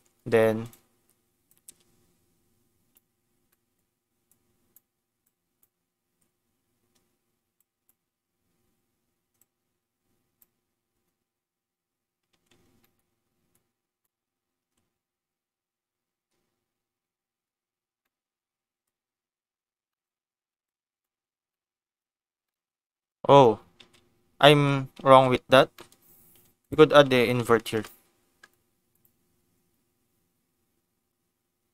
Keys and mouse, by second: 0.6 click, 1.4-3.0 drag, 3.4 middle click, 4.3 click, 5.2 click, 7.5 click, 9.3-11.8 drag, 12.3 ctrl+z, 12.8 middle click, 13.5 click, 14.7 ctrl+x, 18.0 middle click, 19.9 middle click, 20.6 click, 21.6 middle click, 22.4 middle click, 23.9 ctrl+z, 24.6 ctrl+z, 25.2 ctrl+z, 25.7 click, 26.2 shift+a.